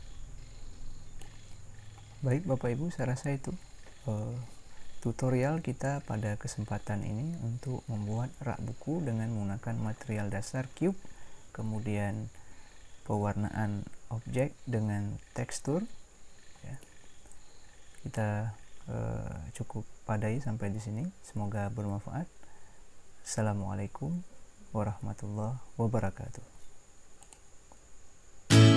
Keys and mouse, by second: 17.0 middle click.